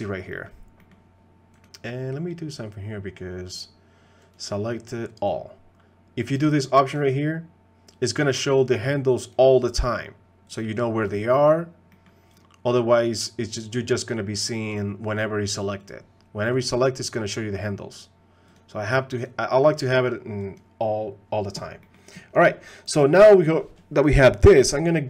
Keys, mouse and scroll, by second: 0.3 middle click, 0.8 middle click, 1.7-7.9 drag, 10.5 click, 11.9 middle click, 14.1-16.0 drag, 18.5-21.6 drag, 21.8 middle click.